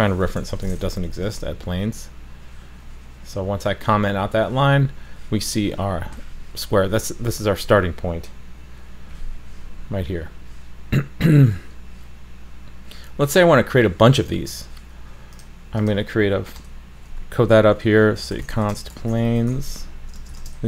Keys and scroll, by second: 0.4 super+/, 1.1 super+s.